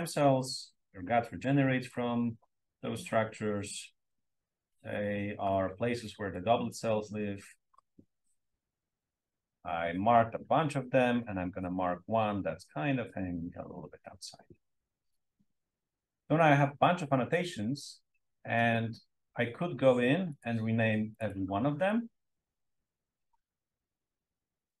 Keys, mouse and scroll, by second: 1.8-5.6 drag, 6.3-7.8 drag, 11.2-13.8 drag, 20.2 click, 21.2 click, 23.4 click, 24.1-24.8 typing.